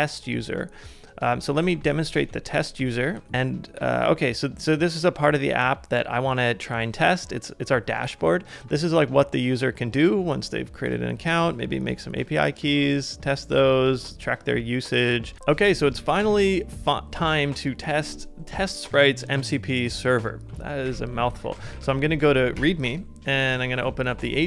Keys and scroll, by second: 1.6 super+c, 2.2 super+Tab, 15.3 super+Tab, 15.9 super+Tab, 20.9 super+p, 21.0-22.2 typing, 22.6 Return, 23.7 alt+super+b.